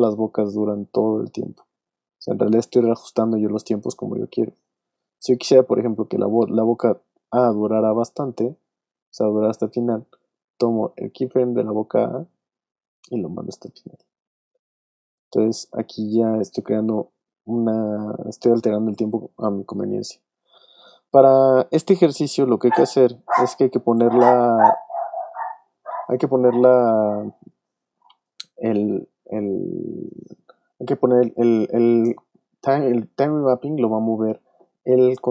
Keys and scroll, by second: 19.6 super+z.